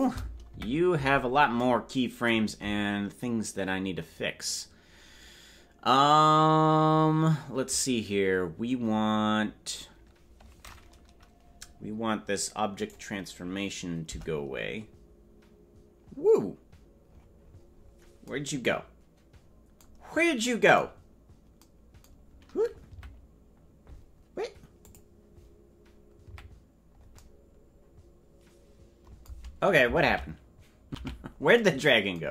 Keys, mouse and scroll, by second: 0.4 KP_Decimal, 12.7 right click, 14.6 Delete, 16.2-17.0 scroll down 1, 17.0-17.7 scroll down 9, 19.9-21.5 scroll down 3, 21.5-22.8 scroll down 5, 22.8 KP_Decimal, 24.7 click, 26.2 KP_Decimal, 31.0 ctrl+z, 32.1 ctrl+z.